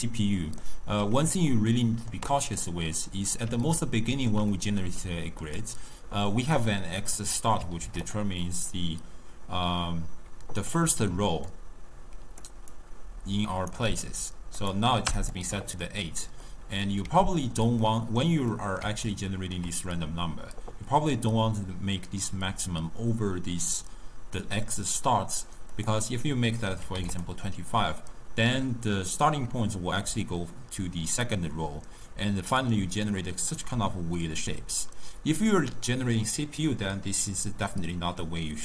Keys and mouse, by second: 0.1-7.0 middle drag, 7.0-8.2 drag, 8.7-11.2 drag, 11.2 d, 11.5 click, 12.5 d, 12.6 d, 12.8-13.8 right drag, 13.8 d, 14.6 click, 16.5-22.2 middle drag, 25.8-27.3 drag, 30.1 d, 30.3-31.3 drag, 31.3-32.1 d, 32.8 d, 33.1 right click, 33.7 d, 33.8 d.